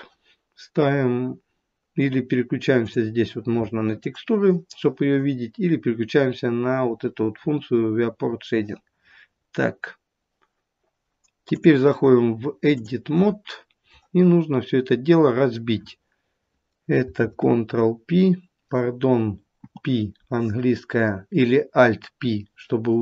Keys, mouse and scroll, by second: 2.9 click, 9.4-11.4 scroll up 1, 11.4 click, 17.2 ctrl+p, 19.5 p.